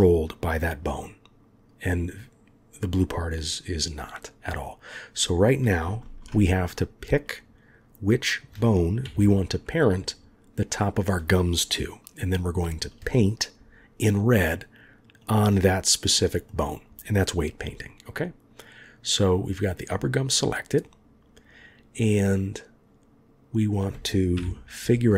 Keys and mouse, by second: 6.0 ctrl+z, 9.0 KP_1, 16.0-19.2 drag, 19.9 click, 24.4 KP_3.